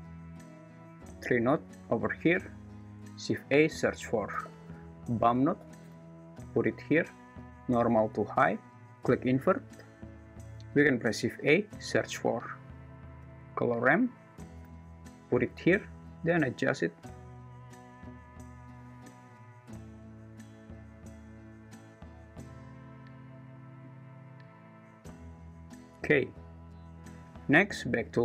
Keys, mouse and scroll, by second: 2.7 click, 7.5 click, 8.1 click, 16.1-18.1 drag, 19.1-22.6 drag, 23.9-25.9 drag.